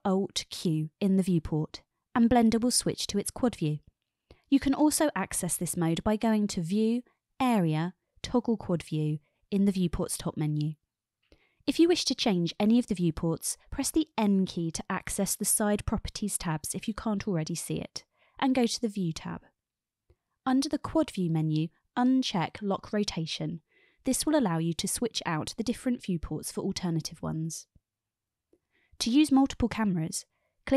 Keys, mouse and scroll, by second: 0.4 ctrl+alt+q, 6.8-12.0 drag, 14.2 n, 19.3 click, 21.5 click, 23.1 click, 24.6 n, 25.2-26.1 middle drag, 26.5-27.4 middle drag, 28.0-30.4 middle drag.